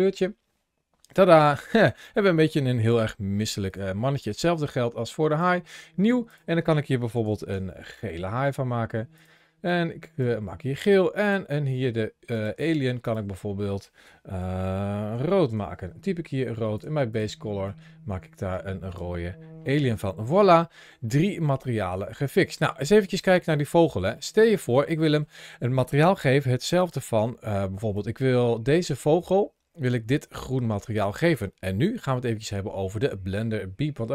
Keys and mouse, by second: 1.5 shift+middle click, 2.0 middle click, 2.7 g, 5.1 click, 6.1-8.3 drag, 7.2 e, 9.0 click, 12.1 click, 12.8-16.6 drag, 15.3 o, 16.9 click, 18.7 click, 19.5 shift+middle click, 19.9 middle drag, 20.5 shift+middle drag, 21.0 middle click, 21.5 shift+middle click, 22.0 middle click, 23.9 shift+middle click, 24.5-25.0 middle drag, 26.1 g, 26.6 click, 27.3 ctrl+shift+a.